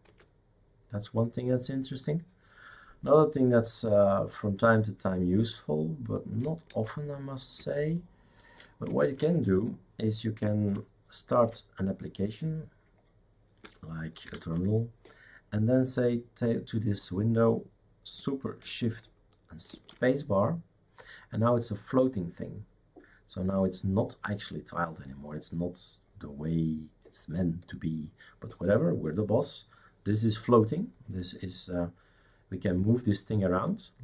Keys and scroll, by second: 0.1 super+f, 6.7 shift+super+q, 9.0 shift+super+q, 11.4 shift+super+q, 14.3 ctrl+alt+t, 19.7 shift+super+space.